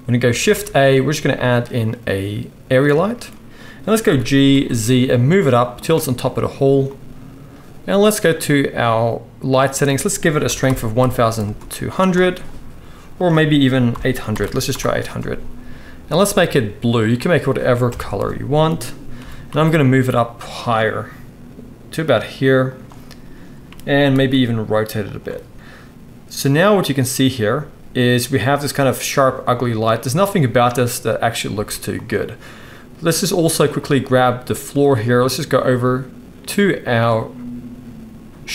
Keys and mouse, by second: 0.4 shift+a, 4.0 g, 8.2 middle click, 8.3-9.5 right drag, 9.5-16.3 middle drag, 11.0 click, 11.0 right click, 11.0 0, 14.4 0, 14.9-16.3 drag, 14.9-38.5 right drag, 17.9 KP_0, 19.2 g, 24.1 r, 31.5 z, 33.6 click, 33.6 middle click.